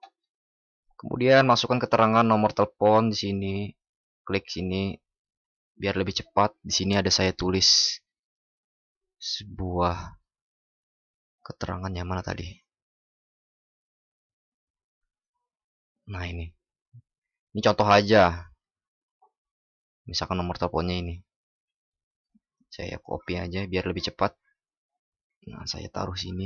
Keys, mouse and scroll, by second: 22.5 ctrl+?, 22.9 ctrl+shift+b.